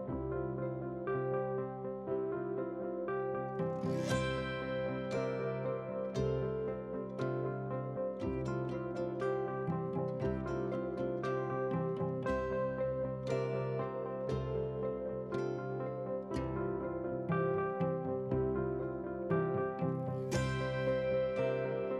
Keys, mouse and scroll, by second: 1.0 g, 2.1 r, 3.6 alt+click, 4.1 click, 4.8 middle click, 5.1 click, 5.5 KP_1, 5.8 e, 7.8 r, 9.7-10.2 scroll up 4, 10.2 2, 10.8 alt+click, 11.2 r, 12.4 g, 14.5 alt+click, 14.9 r, 17.6 alt+click, 17.9 g, 20.8 alt+click, 21.2 e, 21.4 x.